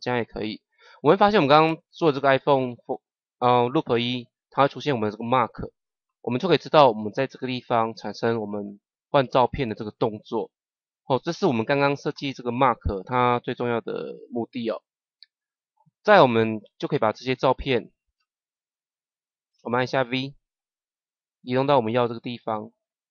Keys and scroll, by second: 19.8 v.